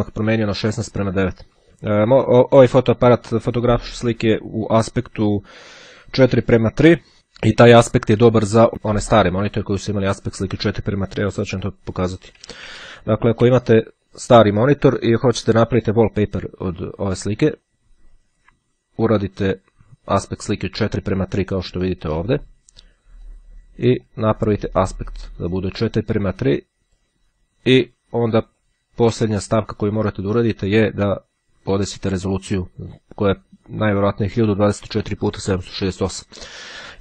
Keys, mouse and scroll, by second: 7.1-8.7 drag, 9.7 click, 11.5-12.8 typing, 16.1 click, 22.1 click, 23.4-24.7 drag, 27.9-29.3 drag, 29.8-31.3 drag.